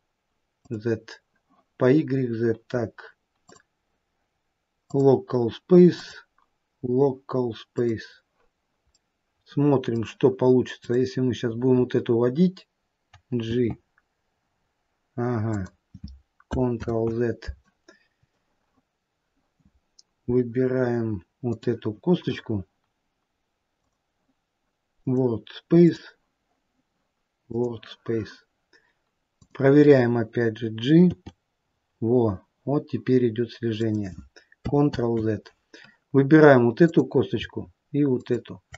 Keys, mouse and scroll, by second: 0.9 click, 6.2 click, 9.2 middle click, 11.1 click, 13.7 g, 17.1 ctrl+z, 21.7 click, 24.0 click, 29.7 click, 31.4 g, 35.2 ctrl+z, 37.2 click, 38.4 shift+click.